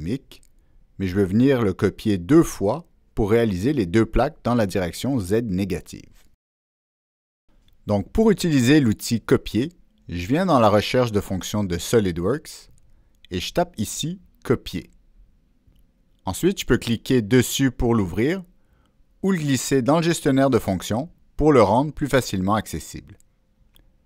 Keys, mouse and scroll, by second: 1.1 click, 11.0 click, 13.2 click, 20.8-23.4 drag.